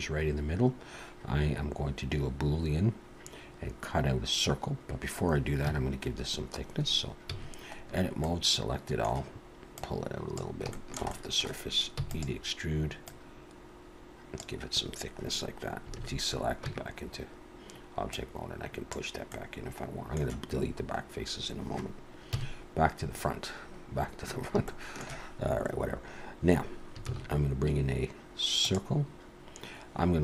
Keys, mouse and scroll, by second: 0.4-2.0 scroll down 1, 5.7 Tab, 7.3 a, 7.7-8.2 scroll down 2, 8.2 middle click, 9.8 click, 10.7 shift+middle click, 11.1 middle click, 12.0 e, 13.0 click, 16.0 alt+a, 16.6 Tab, 18.1 click, 19.3 middle click, 22.3 KP_1, 23.1-23.5 scroll up 3, 24.7 shift+middle click, 27.1 shift+a.